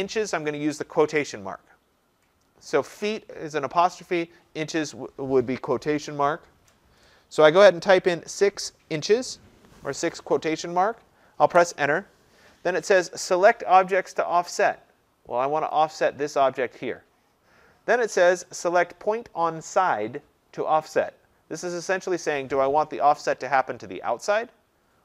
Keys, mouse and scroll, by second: 11.5 Return, 15.9 click, 16.5-21.0 drag.